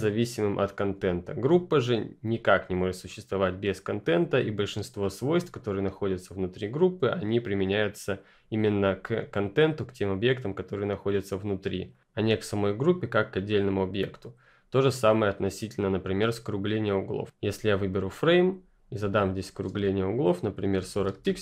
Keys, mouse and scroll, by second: 1.0 click, 3.9 click, 11.8 click, 17.8 click, 20.5-21.3 typing.